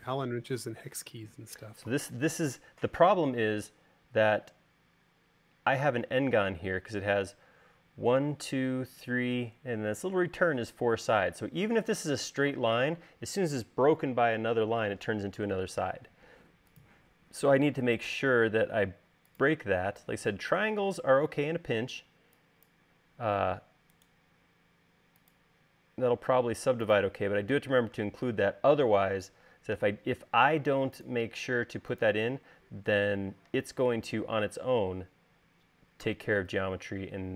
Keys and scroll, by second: 20.5 space, 22.4 e, 30.9 l, 33.0 space.